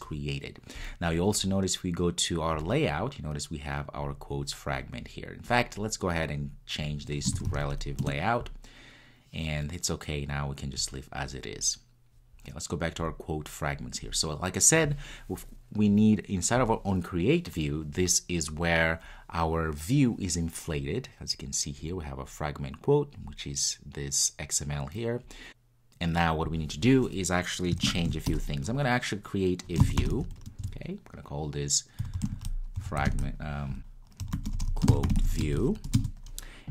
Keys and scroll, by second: 8.1 Return.